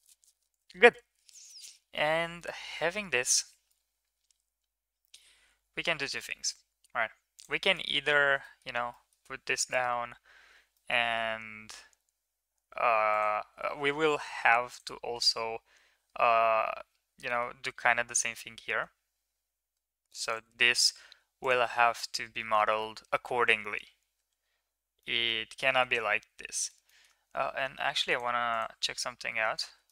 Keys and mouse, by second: 1.5 middle drag, 2.4-3.0 middle drag, 3.7-6.1 middle drag, 7.4 click, 7.7 middle click, 8.4 middle click, 8.9 middle click, 10.7 middle click, 11.1 g, 13.8 Tab, 14.4 Tab, 15.1 Tab, 17.3 middle click, 17.8 ctrl+r, 22.0-22.6 middle drag, 22.8 shift+middle drag, 23.1 middle drag, 24.3 Tab, 25.0 middle drag, 25.6 middle drag, 26.5 shift+middle drag, 26.9 middle drag, 29.2 h, 29.8 shift+middle drag.